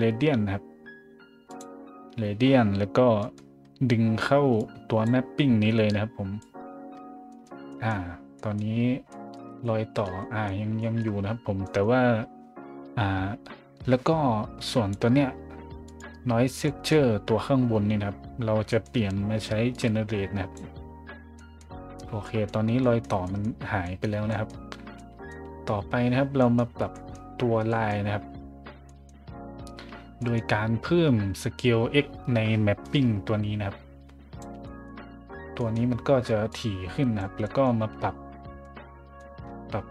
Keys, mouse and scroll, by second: 1.5 click, 2.9-3.7 scroll up 3, 4.6-5.0 drag, 5.8-6.4 drag, 6.8 middle click, 7.3 middle click, 7.7 middle drag, 8.4 middle drag, 9.1 middle drag, 9.6-10.0 shift+middle drag, 10.2 middle click, 10.8 shift+middle drag, 11.6 middle click, 14.6 click, 15.8 click, 16.6 middle click, 18.7 middle click, 19.0-19.4 scroll down 1, 19.7 click, 21.3 middle drag, 22.2 middle drag, 22.8 middle drag, 23.2 middle drag, 23.8 middle drag, 24.3 middle drag, 24.9-25.3 middle drag, 26.3 middle drag, 26.9 middle click, 27.7 middle drag, 28.9 middle click, 29.5 middle click, 32.8-34.4 drag, 34.6 scroll up 1, 35.5 scroll up 1, 36.5 click, 37.4 middle click, 38.0-38.5 scroll down 2, 38.6-39.2 middle drag, 39.4 scroll up 1, 39.4 middle click.